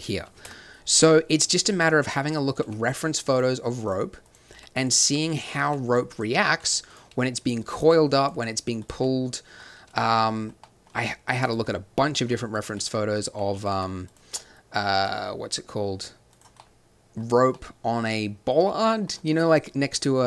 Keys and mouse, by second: 0.4 KP_7, 0.9 g, 1.5 click, 2.2 s, 2.6 g, 3.8 click, 4.5-8.3 typing, 5.3 click, 5.9 click, 9.8 z, 10.9 g, 12.2 g, 13.2 r, 13.7 g, 15.0 g.